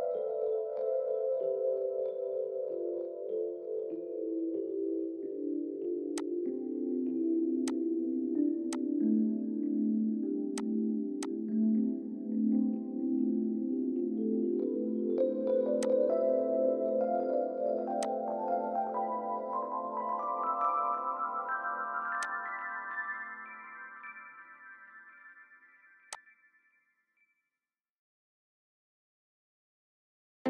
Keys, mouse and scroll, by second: 3.8 scroll up 1, 4.1-4.5 scroll down 1, 9.7-11.4 scroll down 1, 11.7-12.2 scroll down 1, 12.2 middle click, 19.6 Escape, 19.9 Escape, 20.7 scroll up 1, 25.1-26.2 scroll up 1.